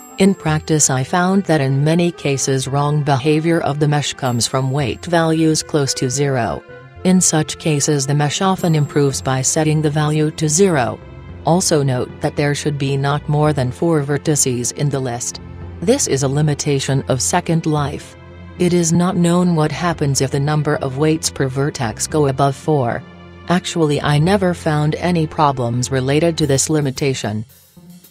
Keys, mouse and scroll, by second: 1.4-3.2 drag, 7.0-8.7 drag, 12.0-13.6 right drag, 13.3-15.0 drag, 15.2-17.0 middle drag, 17.3-19.6 right drag, 19.4-21.2 drag, 21.8-23.5 right drag, 23.0-24.6 drag, 24.9-28.1 middle drag, 27.4-28.1 right drag.